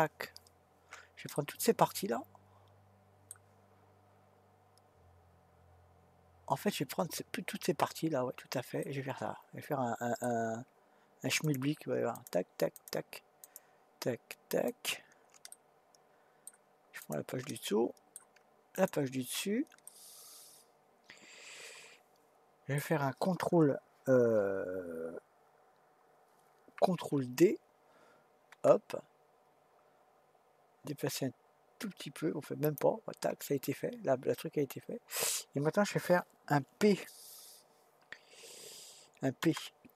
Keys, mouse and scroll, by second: 1.3-4.5 middle drag, 8.8-11.4 middle drag, 11.4 shift+click, 12.1 shift+click, 12.7 shift+click, 13.4 shift+click, 14.7 shift+click, 15.5-17.0 middle drag, 17.0 shift+click, 17.5-18.7 middle drag, 18.7 shift+click, 19.8-22.9 middle drag, 28.5 shift+d, 39.4 p.